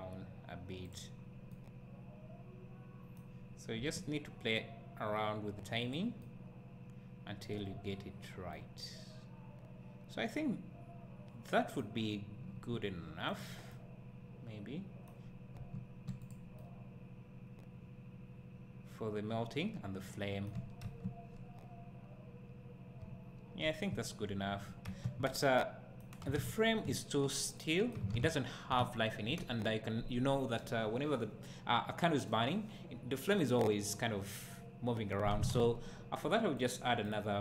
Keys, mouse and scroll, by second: 0.9 click, 1.5-5.9 right drag, 3.8 g, 5.9 click, 6.3-13.4 right drag, 7.6-8.6 scroll down 2, 12.6 g, 13.4 click, 13.8-16.3 right drag, 15.6 g, 16.3 click, 16.6-37.4 right drag, 20.9 space, 25.0 space, 26.9 `, 28.8 `.